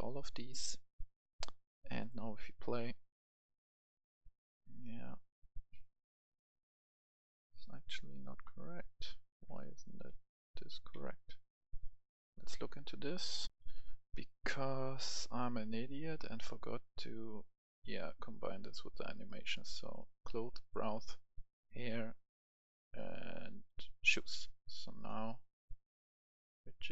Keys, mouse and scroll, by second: 10.1 w, 10.6 w, 12.2 Escape, 13.4 right click, 13.5 F10, 15.0 right click, 16.1-19.4 drag, 19.5-24.3 right drag, 24.6 click.